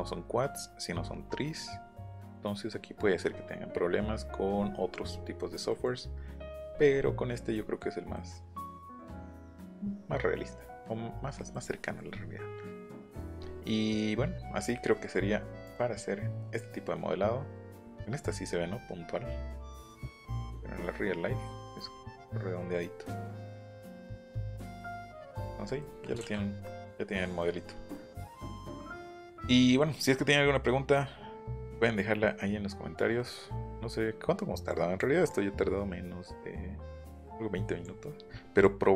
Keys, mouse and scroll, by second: 3.0-4.0 scroll down 4, 5.7 scroll down 2, 6.6 scroll up 2, 7.0 scroll down 2, 11.7 middle click, 12.2 middle click, 13.4 middle click, 13.8 middle click, 14.7 middle click, 15.6 click, 19.0 scroll down 1, 19.9-20.9 scroll up 2, 24.2 click, 24.7 scroll down 1, 24.8 middle click, 25.2 middle click, 25.7 middle click, 26.6 middle click, 27.4 middle click, 27.9 middle click, 28.5 middle click, 33.1 middle click, 34.6 click, 35.3-37.8 drag, 38.6-38.9 drag.